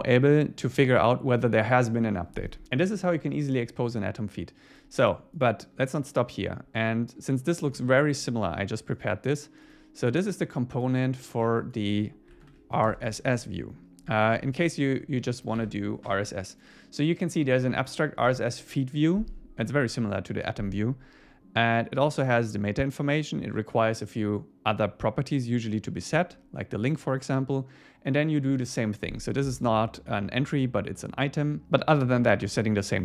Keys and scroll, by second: 7.8 super+1, 12.4 shift+super+Left, 12.9 super+7, 13.2 super+1, 13.6 super+Escape, 14.3 super+1, 15.6 super+s.